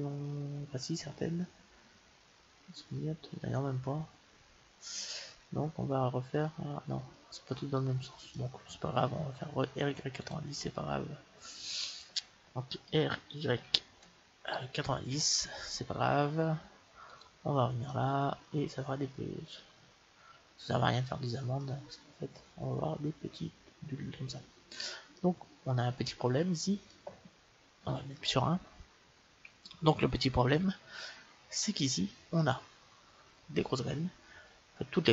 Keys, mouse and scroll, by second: 10.1-12.2 drag, 10.9-13.4 middle drag, 12.8 r, 17.0-19.1 drag, 17.8-19.7 middle drag, 21.9-27.8 middle drag, 27.8 KP_1.